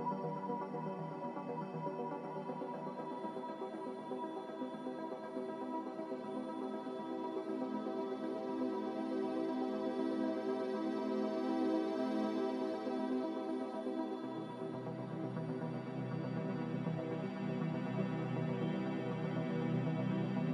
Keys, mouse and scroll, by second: 3.4 Delete, 4.1 Delete, 11.5 a.